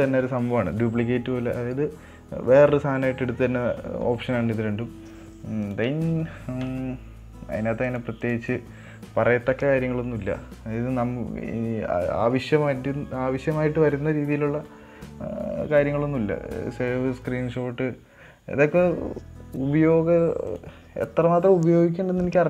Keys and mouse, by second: 6.0-7.7 drag, 8.2 click, 8.7-19.6 drag, 20.9-22.4 drag.